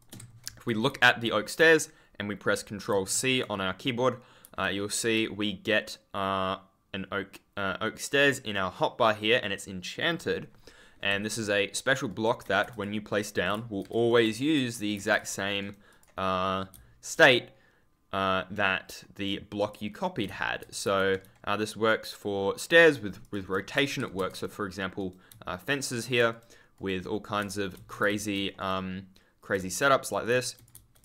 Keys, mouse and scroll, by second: 0.1 Escape, 0.4 w, 2.8 ctrl+c, 4.5 w, 11.0 Escape, 12.0 right click, 12.4 a, 12.6 click, 13.0 right click, 13.4 click, 13.9 right click, 14.1 click, 14.7 right click, 14.9 w, 14.9 click, 15.5 right click, 15.8 click, 16.3 scroll down 1, 16.4-17.3 typing, 16.5 scroll up 1, 19.1 right click, 19.5 click, 19.9-20.8 typing, 23.1 shift+click, 23.7 1, 23.9 Escape, 24.1 1, 24.2 right click, 24.6-24.9 scroll down 1, 26.0 super+click, 26.2 right click, 27.7 ctrl+c, 27.7-29.5 typing, 28.5 right click, 29.9 click, 30.7 d, 30.9 click.